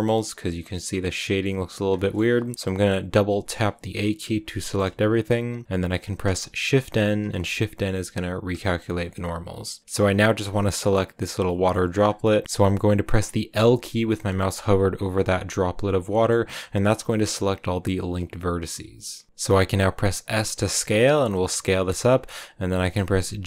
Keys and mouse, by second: 0.6 click, 1.9 click, 2.3 a, 2.8 a, 3.6 a, 7.3 shift+n, 8.5 middle click, 9.2 a, 9.8-10.8 drag, 11.4 click, 13.6 a, 13.6 l, 15.1-16.2 drag, 17.0 click, 20.1 s, 21.7 click, 23.2 g.